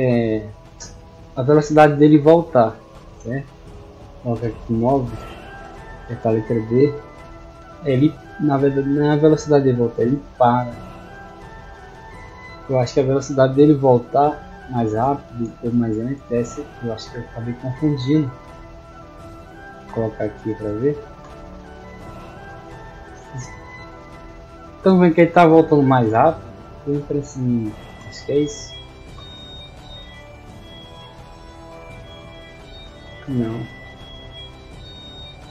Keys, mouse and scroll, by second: 1.8 click, 5.8 d, 7.5 a, 10.7 a, 12.5 d, 18.1 click, 18.7 click, 21.4 d, 23.1 a, 24.8 d, 29.3 d, 30.7 a, 32.5 d, 34.6 click.